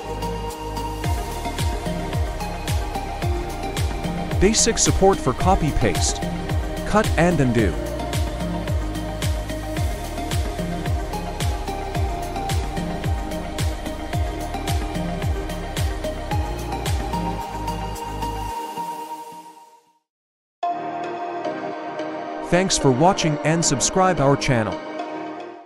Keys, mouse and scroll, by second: 0.7 right click, 10.2 click, 12.1 click, 12.7 click, 19.2-20.3 drag, 21.3 click.